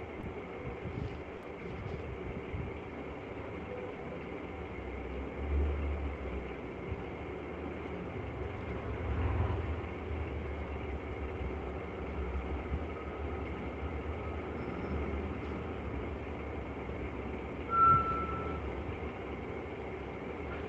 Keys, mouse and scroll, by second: 0.7 click, 1.1 click, 1.5 click, 3.1 click, 4.9 click, 5.7 click, 6.3 click, 6.7 middle click, 7.3 click, 7.9 click, 9.4 middle click, 9.4 click, 10.2 click, 10.9 click, 12.3 middle click, 12.3 click, 12.9 click, 13.8 click, 14.4 click, 15.4 click, 16.6 alt+click, 16.8 alt+click, 17.9 click, 19.3 click, 19.7 click.